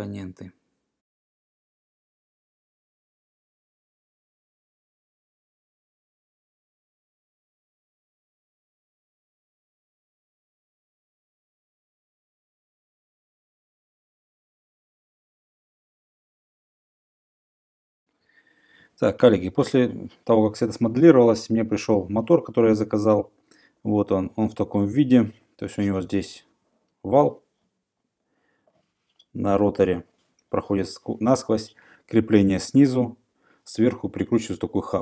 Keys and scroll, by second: 5.1 Escape, 5.3 m, 6.2 Return, 11.9 Return, 16.3-17.0 typing.